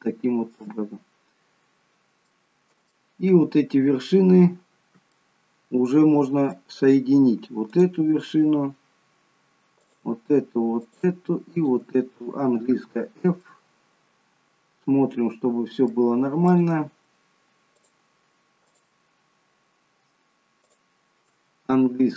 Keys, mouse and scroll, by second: 2.3 middle click, 5.1 middle click, 7.8 click, 9.8 shift+click, 12.8 f, 13.3 middle click, 17.8 click, 22.0 f.